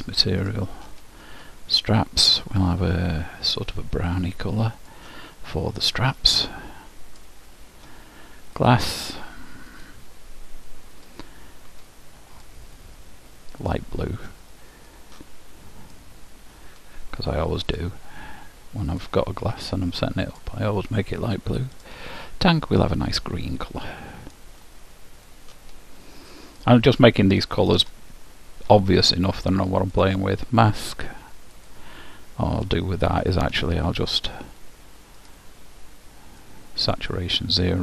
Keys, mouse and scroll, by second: 1.9-3.7 drag, 6.1-7.9 drag, 8.8-11.6 drag, 12.5-14.3 drag, 15.0-16.8 drag, 17.9-20.8 drag, 21.9-23.7 drag, 25.4-27.2 drag, 28.1-29.9 middle drag, 30.3-33.5 drag, 34.1-35.9 drag.